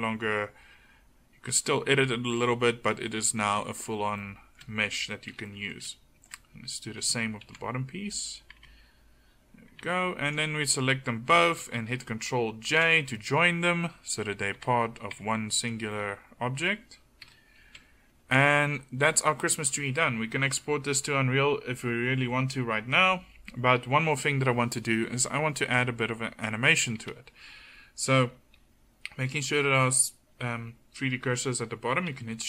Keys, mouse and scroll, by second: 0.0 g, 1.7-3.1 drag, 3.6 Tab, 7.5 alt+c, 8.6 Tab, 9.8 Tab, 12.7 ctrl+j, 14.6 Tab, 15.2 Tab, 17.3 KP_1, 17.8 a, 32.2 shift+c.